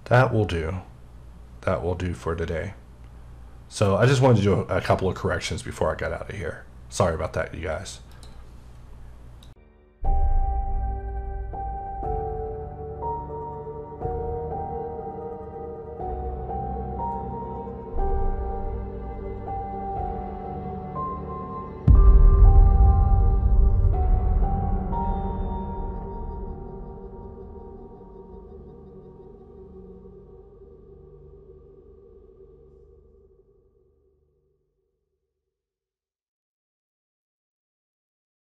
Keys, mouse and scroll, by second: 8.1 click.